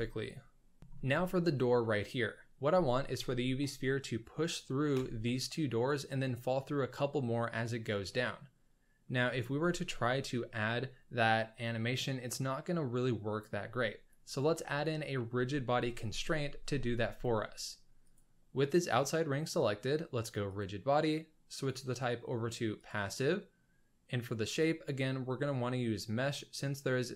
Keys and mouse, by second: 8.0-9.0 middle drag, 18.0 middle click, 20.7-23.0 drag, 24.6-26.3 drag.